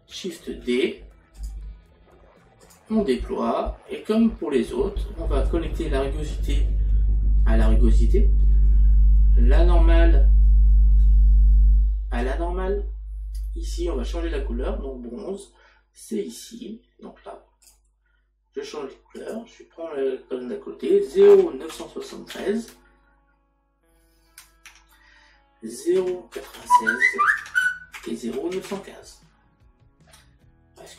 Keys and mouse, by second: 2.4 click, 23.3 KP_3, 26.0 KP_Decimal, 27.4 KP_6, 28.0 KP_Decimal, 30.8 click.